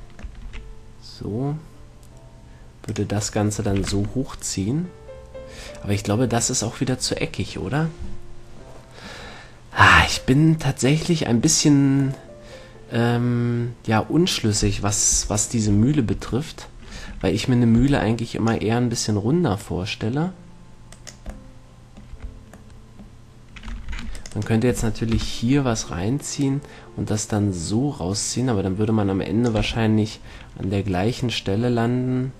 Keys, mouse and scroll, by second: 0.3-2.5 middle drag, 0.7 e, 3.3-5.2 drag, 4.1 a, 4.3 Tab, 7.5 click, 7.7-9.1 middle drag, 10.7 middle click, 15.3 KP_3, 16.4 Tab, 18.0 b, 20.0-21.8 drag, 22.4 a, 24.1 ctrl+r, 24.9-26.5 right drag, 25.6 KP_7, 26.7-28.5 drag, 29.9 a, 30.1 middle click.